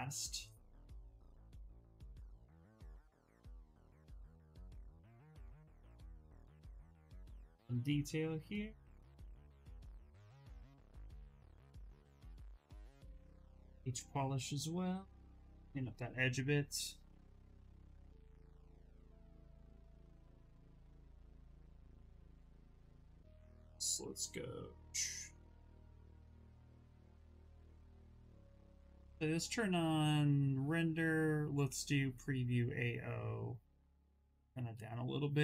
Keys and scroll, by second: 12.9-14.3 typing, 22.0 b, 24.6 s, 27.4 ctrl+z.